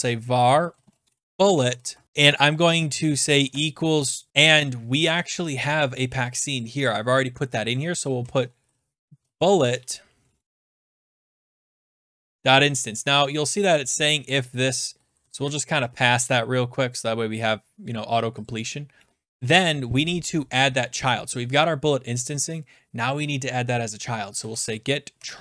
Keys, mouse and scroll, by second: 0.0-3.9 typing, 4.4 scroll, 6.6-7.4 scroll, 7.4-9.3 click, 7.9-12.9 typing, 13.2 scroll down 2, 14.0 click, 14.3-15.8 typing, 14.6 scroll, 17.6 scroll, 18.3 scroll down 3, 18.4 click, 19.0 Return, 24.1-25.4 typing.